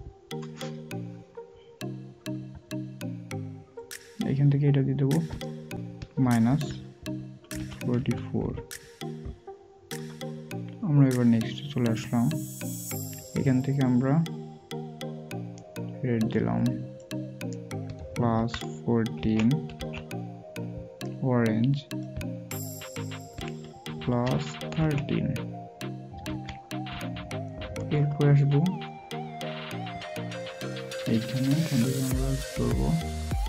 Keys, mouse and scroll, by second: 17.9-19.2 typing.